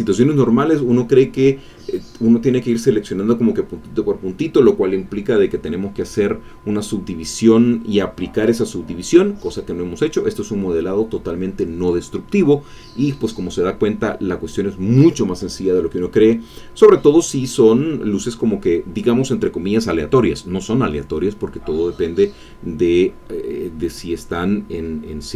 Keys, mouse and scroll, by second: 16.2-16.5 scroll down 2.